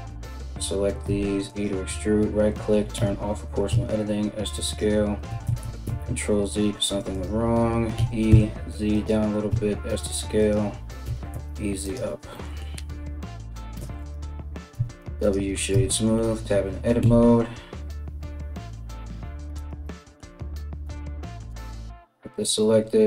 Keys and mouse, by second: 0.1-23.0 alt+middle drag, 0.6 e, 2.6 o, 3.3 s, 5.1 ctrl+z, 6.7 right click, 7.6 e, 9.1 s, 10.6 e, 13.3 Tab, 13.6 right click, 14.3 w, 15.3 Tab, 16.6 KP_3, 19.2 alt+right click, 20.4 KP_1.